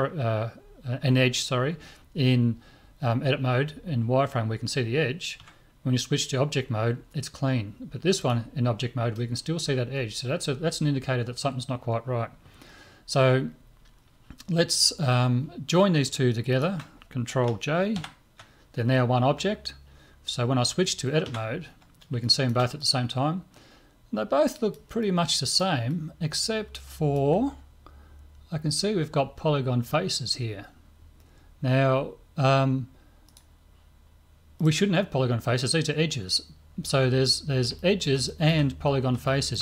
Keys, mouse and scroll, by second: 5.4 Tab, 8.2 right click, 16.5 right click, 18.0 ctrl+j, 21.3 Tab, 22.2-24.7 middle drag, 25.0-27.7 middle drag, 33.3-36.4 right drag, 37.0-37.8 scroll up 1, 37.8-39.6 middle drag.